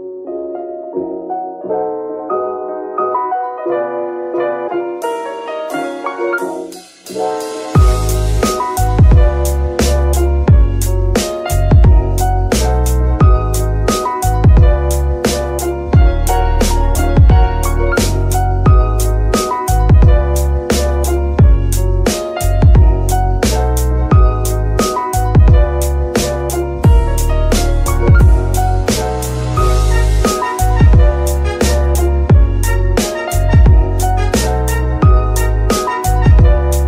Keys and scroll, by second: 5.6 a, 9.9 z, 15.8 z, 35.4 z, 36.2 g, 36.7 Escape.